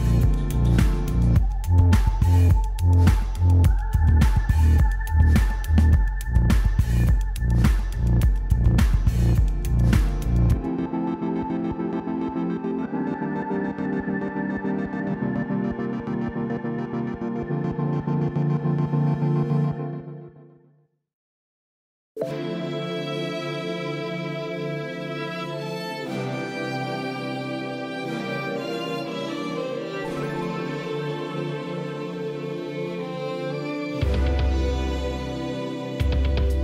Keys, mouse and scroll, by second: 9.0-25.2 drag, 36.3 o.